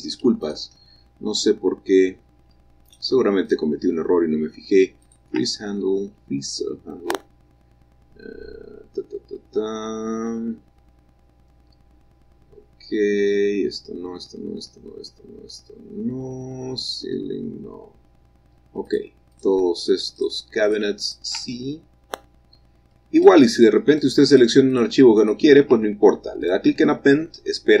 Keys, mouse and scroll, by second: 0.7-4.6 ctrl+drag, 0.7-3.2 scroll up 1, 5.3-6.0 scroll up 1, 5.3-6.5 ctrl+drag, 7.0-8.9 scroll down 2, 8.9-16.7 scroll up 3, 17.7-18.6 scroll up 2, 18.6-19.2 scroll up 1, 19.2-20.6 ctrl+drag, 21.0 ctrl+click, 21.3 ctrl+click, 21.8 click, 22.1-24.0 scroll up 1, 23.5-26.6 ctrl+drag, 26.7-27.8 drag.